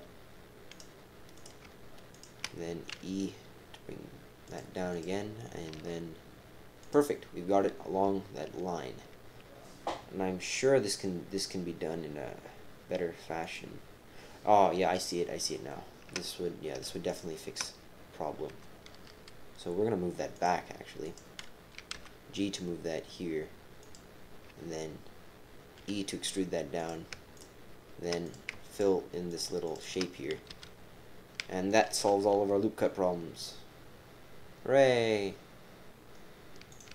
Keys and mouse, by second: 1.3 click, 2.1 shift+click, 2.9 e, 4.9 click, 5.7 g, 15.1 shift+click, 15.5 shift+click, 17.1 shift+click, 18.5 g, 20.9-21.7 typing, 21.0 click, 23.6-24.3 typing, 25.8 e, 27.3 shift+click, 28.2 click, 28.7 shift+click, 29.3 shift+click, 29.6 shift+click, 30.5 f, 30.9 f, 31.9 ctrl+r.